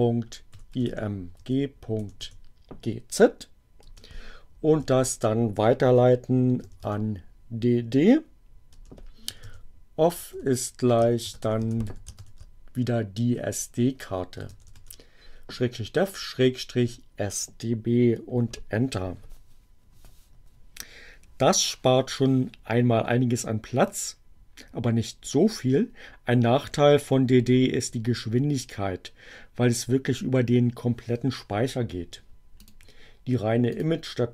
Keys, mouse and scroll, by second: 0.0-2.5 typing, 3.7 space, 4.7 alt+<, 5.8 space, 6.4 d, 8.5-12.5 typing, 14.2 d, 14.6 b, 32.4 click, 33.6 click.